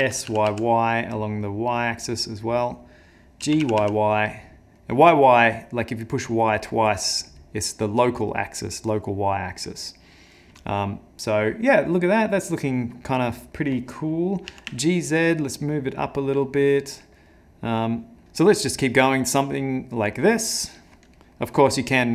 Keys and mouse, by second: 0.0 s, 3.5 g, 8.5 middle click, 10.3 middle click, 13.3 middle click, 14.5 g, 17.4 middle click, 21.2 middle click, 21.5 middle click, 21.8 middle click.